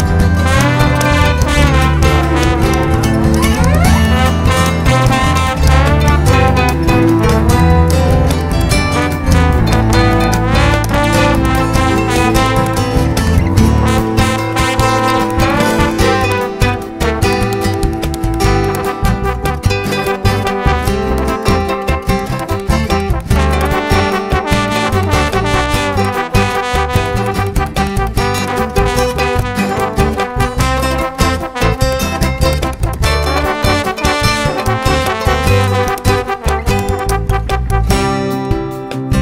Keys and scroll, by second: 10.8 KP_1, 11.0 KP_5, 23.1 ctrl+alt+shift+s.